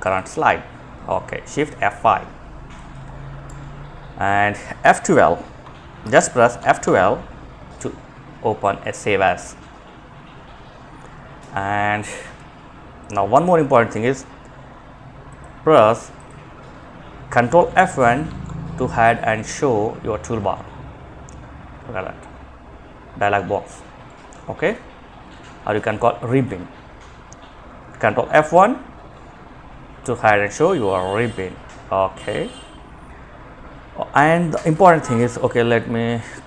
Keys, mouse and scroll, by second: 2.6 Escape, 3.8 click, 5.7 F12, 10.6 Escape, 14.4 click, 18.4 F1, 27.4 F1, 33.9 click, 36.3 ctrl+c.